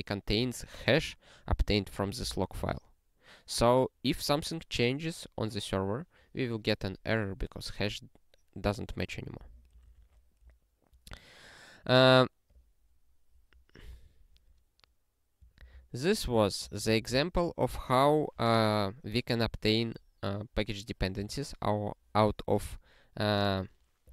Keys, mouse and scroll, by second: 9.8 ctrl+s, 12.5 click, 15.6 ctrl+space, 15.7 ctrl+p, 16.3 ctrl+p, 16.8 ctrl+p, 17.1 ctrl+a.